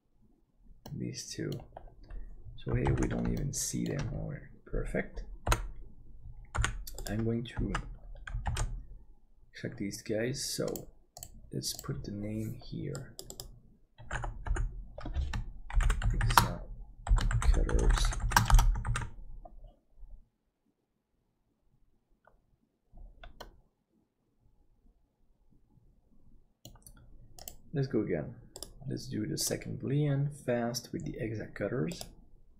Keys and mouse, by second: 1.0 middle click, 2.9 alt+z, 3.5 shift+middle click, 5.5 l, 6.6 p, 7.1 click, 7.7 Tab, 8.0 middle click, 8.5 alt+z, 14.1 F1, 14.5 F2, 17.8 shift+t, 19.1 ctrl+s, 23.4-26.8 middle drag.